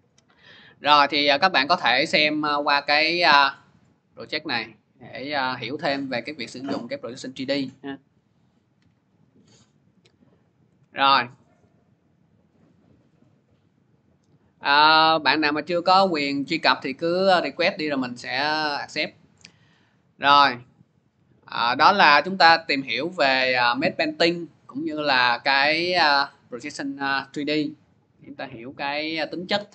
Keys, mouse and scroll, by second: 1.0 click, 3.5 click, 5.7 click, 9.3 alt+Tab, 10.5 alt+Tab, 10.9 alt+Tab, 11.2 click, 13.9 click, 15.1 click, 20.0 click, 21.0 click.